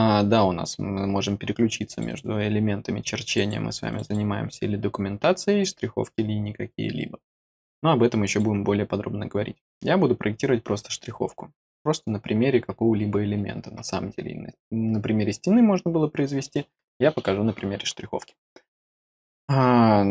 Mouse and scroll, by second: 1.9 click, 2.0 click, 3.1 click, 3.9 click, 4.0 click, 8.2 click.